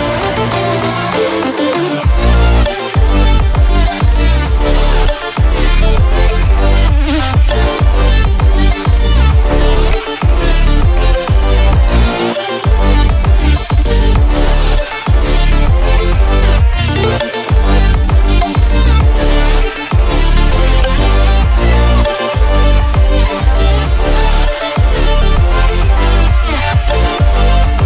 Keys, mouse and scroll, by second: 0.8 shift+right click, 1.8-5.2 shift+drag, 6.2 shift+click, 8.1 shift+click, 9.2-10.9 shift+drag, 10.9-14.2 shift+drag, 14.2-15.4 shift+drag, 15.6-18.1 shift+drag, 18.5 shift+click, 20.4-23.1 shift+drag, 23.2 shift+i, 23.4 shift+click, 24.4-26.0 shift+drag, 26.1 shift+click, 26.9 shift+v, 27.0 shift+click.